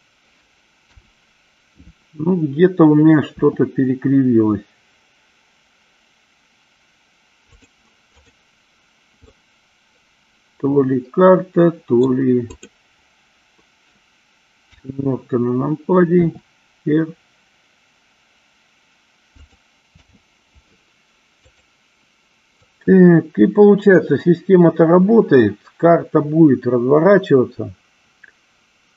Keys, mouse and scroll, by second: 1.2 KP_7, 3.7 r, 8.4 click, 9.6-12.3 middle drag, 14.9 KP_7, 16.4 r, 19.7 click, 20.2 h, 21.7 click, 23.0-28.9 drag.